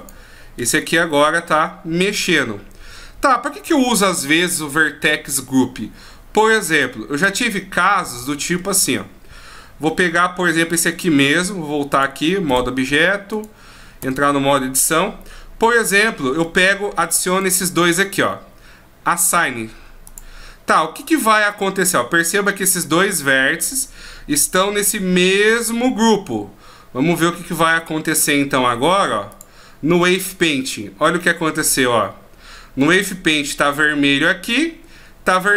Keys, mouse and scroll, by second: 0.0 right click, 0.6 r, 6.8 middle click, 10.5 right click, 12.5 click, 13.3 right click, 14.0 Tab, 16.6 shift+right click, 17.3 shift+right click, 20.0 click, 27.8 Tab, 29.3 click.